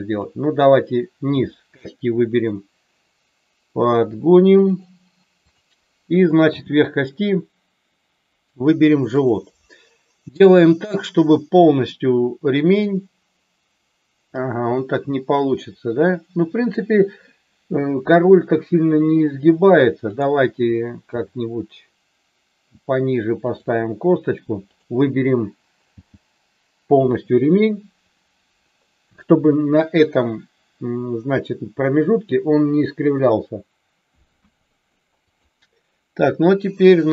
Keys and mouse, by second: 0.1 click, 1.3 g, 6.4 g, 21.1 g, 23.4 click, 25.8 g, 26.8 click, 34.3 KP_1, 35.3 click.